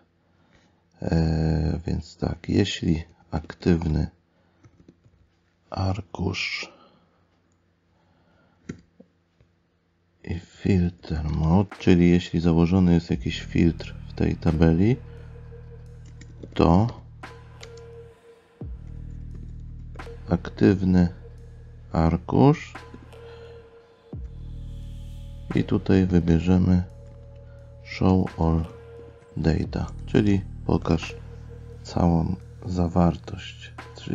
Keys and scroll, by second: 16.1 space, 30.2 space.